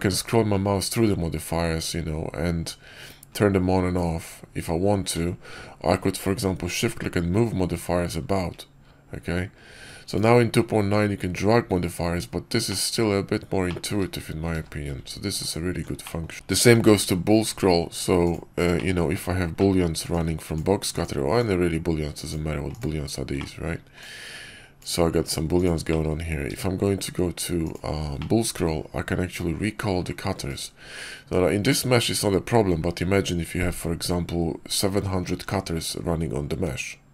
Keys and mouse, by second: 12.6-13.0 middle drag, 13.5-13.8 middle drag, 14.4 q, 15.9 middle drag, 16.6 shift+a, 18.6 click, 19.5 drag, 19.6 middle click, 20.0-20.9 drag, 21.3-22.7 drag, 23.3 middle drag, 23.9-25.6 drag, 25.8 middle drag, 26.4 q, 28.1-30.5 drag.